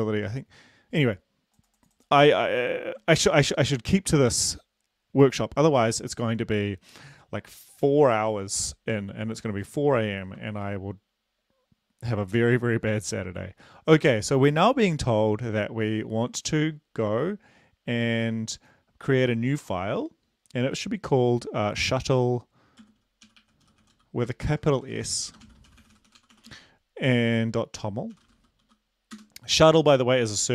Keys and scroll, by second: 3.1 ctrl+c, 22.8-26.5 typing, 28.1-28.7 typing, 29.1 Return, 30.3 ctrl+v.